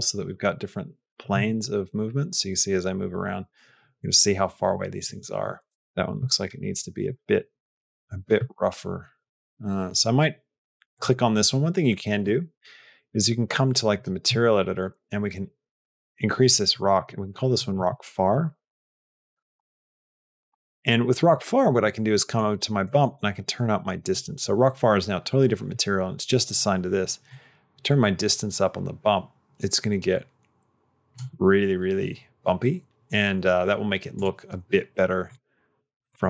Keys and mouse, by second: 1.4-5.0 shift+middle drag, 5.5 s, 5.8 g, 10.7 click, 12.0 click, 13.8 click, 15.6 click, 16.6-21.1 drag, 19.3 BackSpace, 20.4 BackSpace, 22.0 middle click, 22.7 middle click, 27.2-31.0 drag, 35.1 click.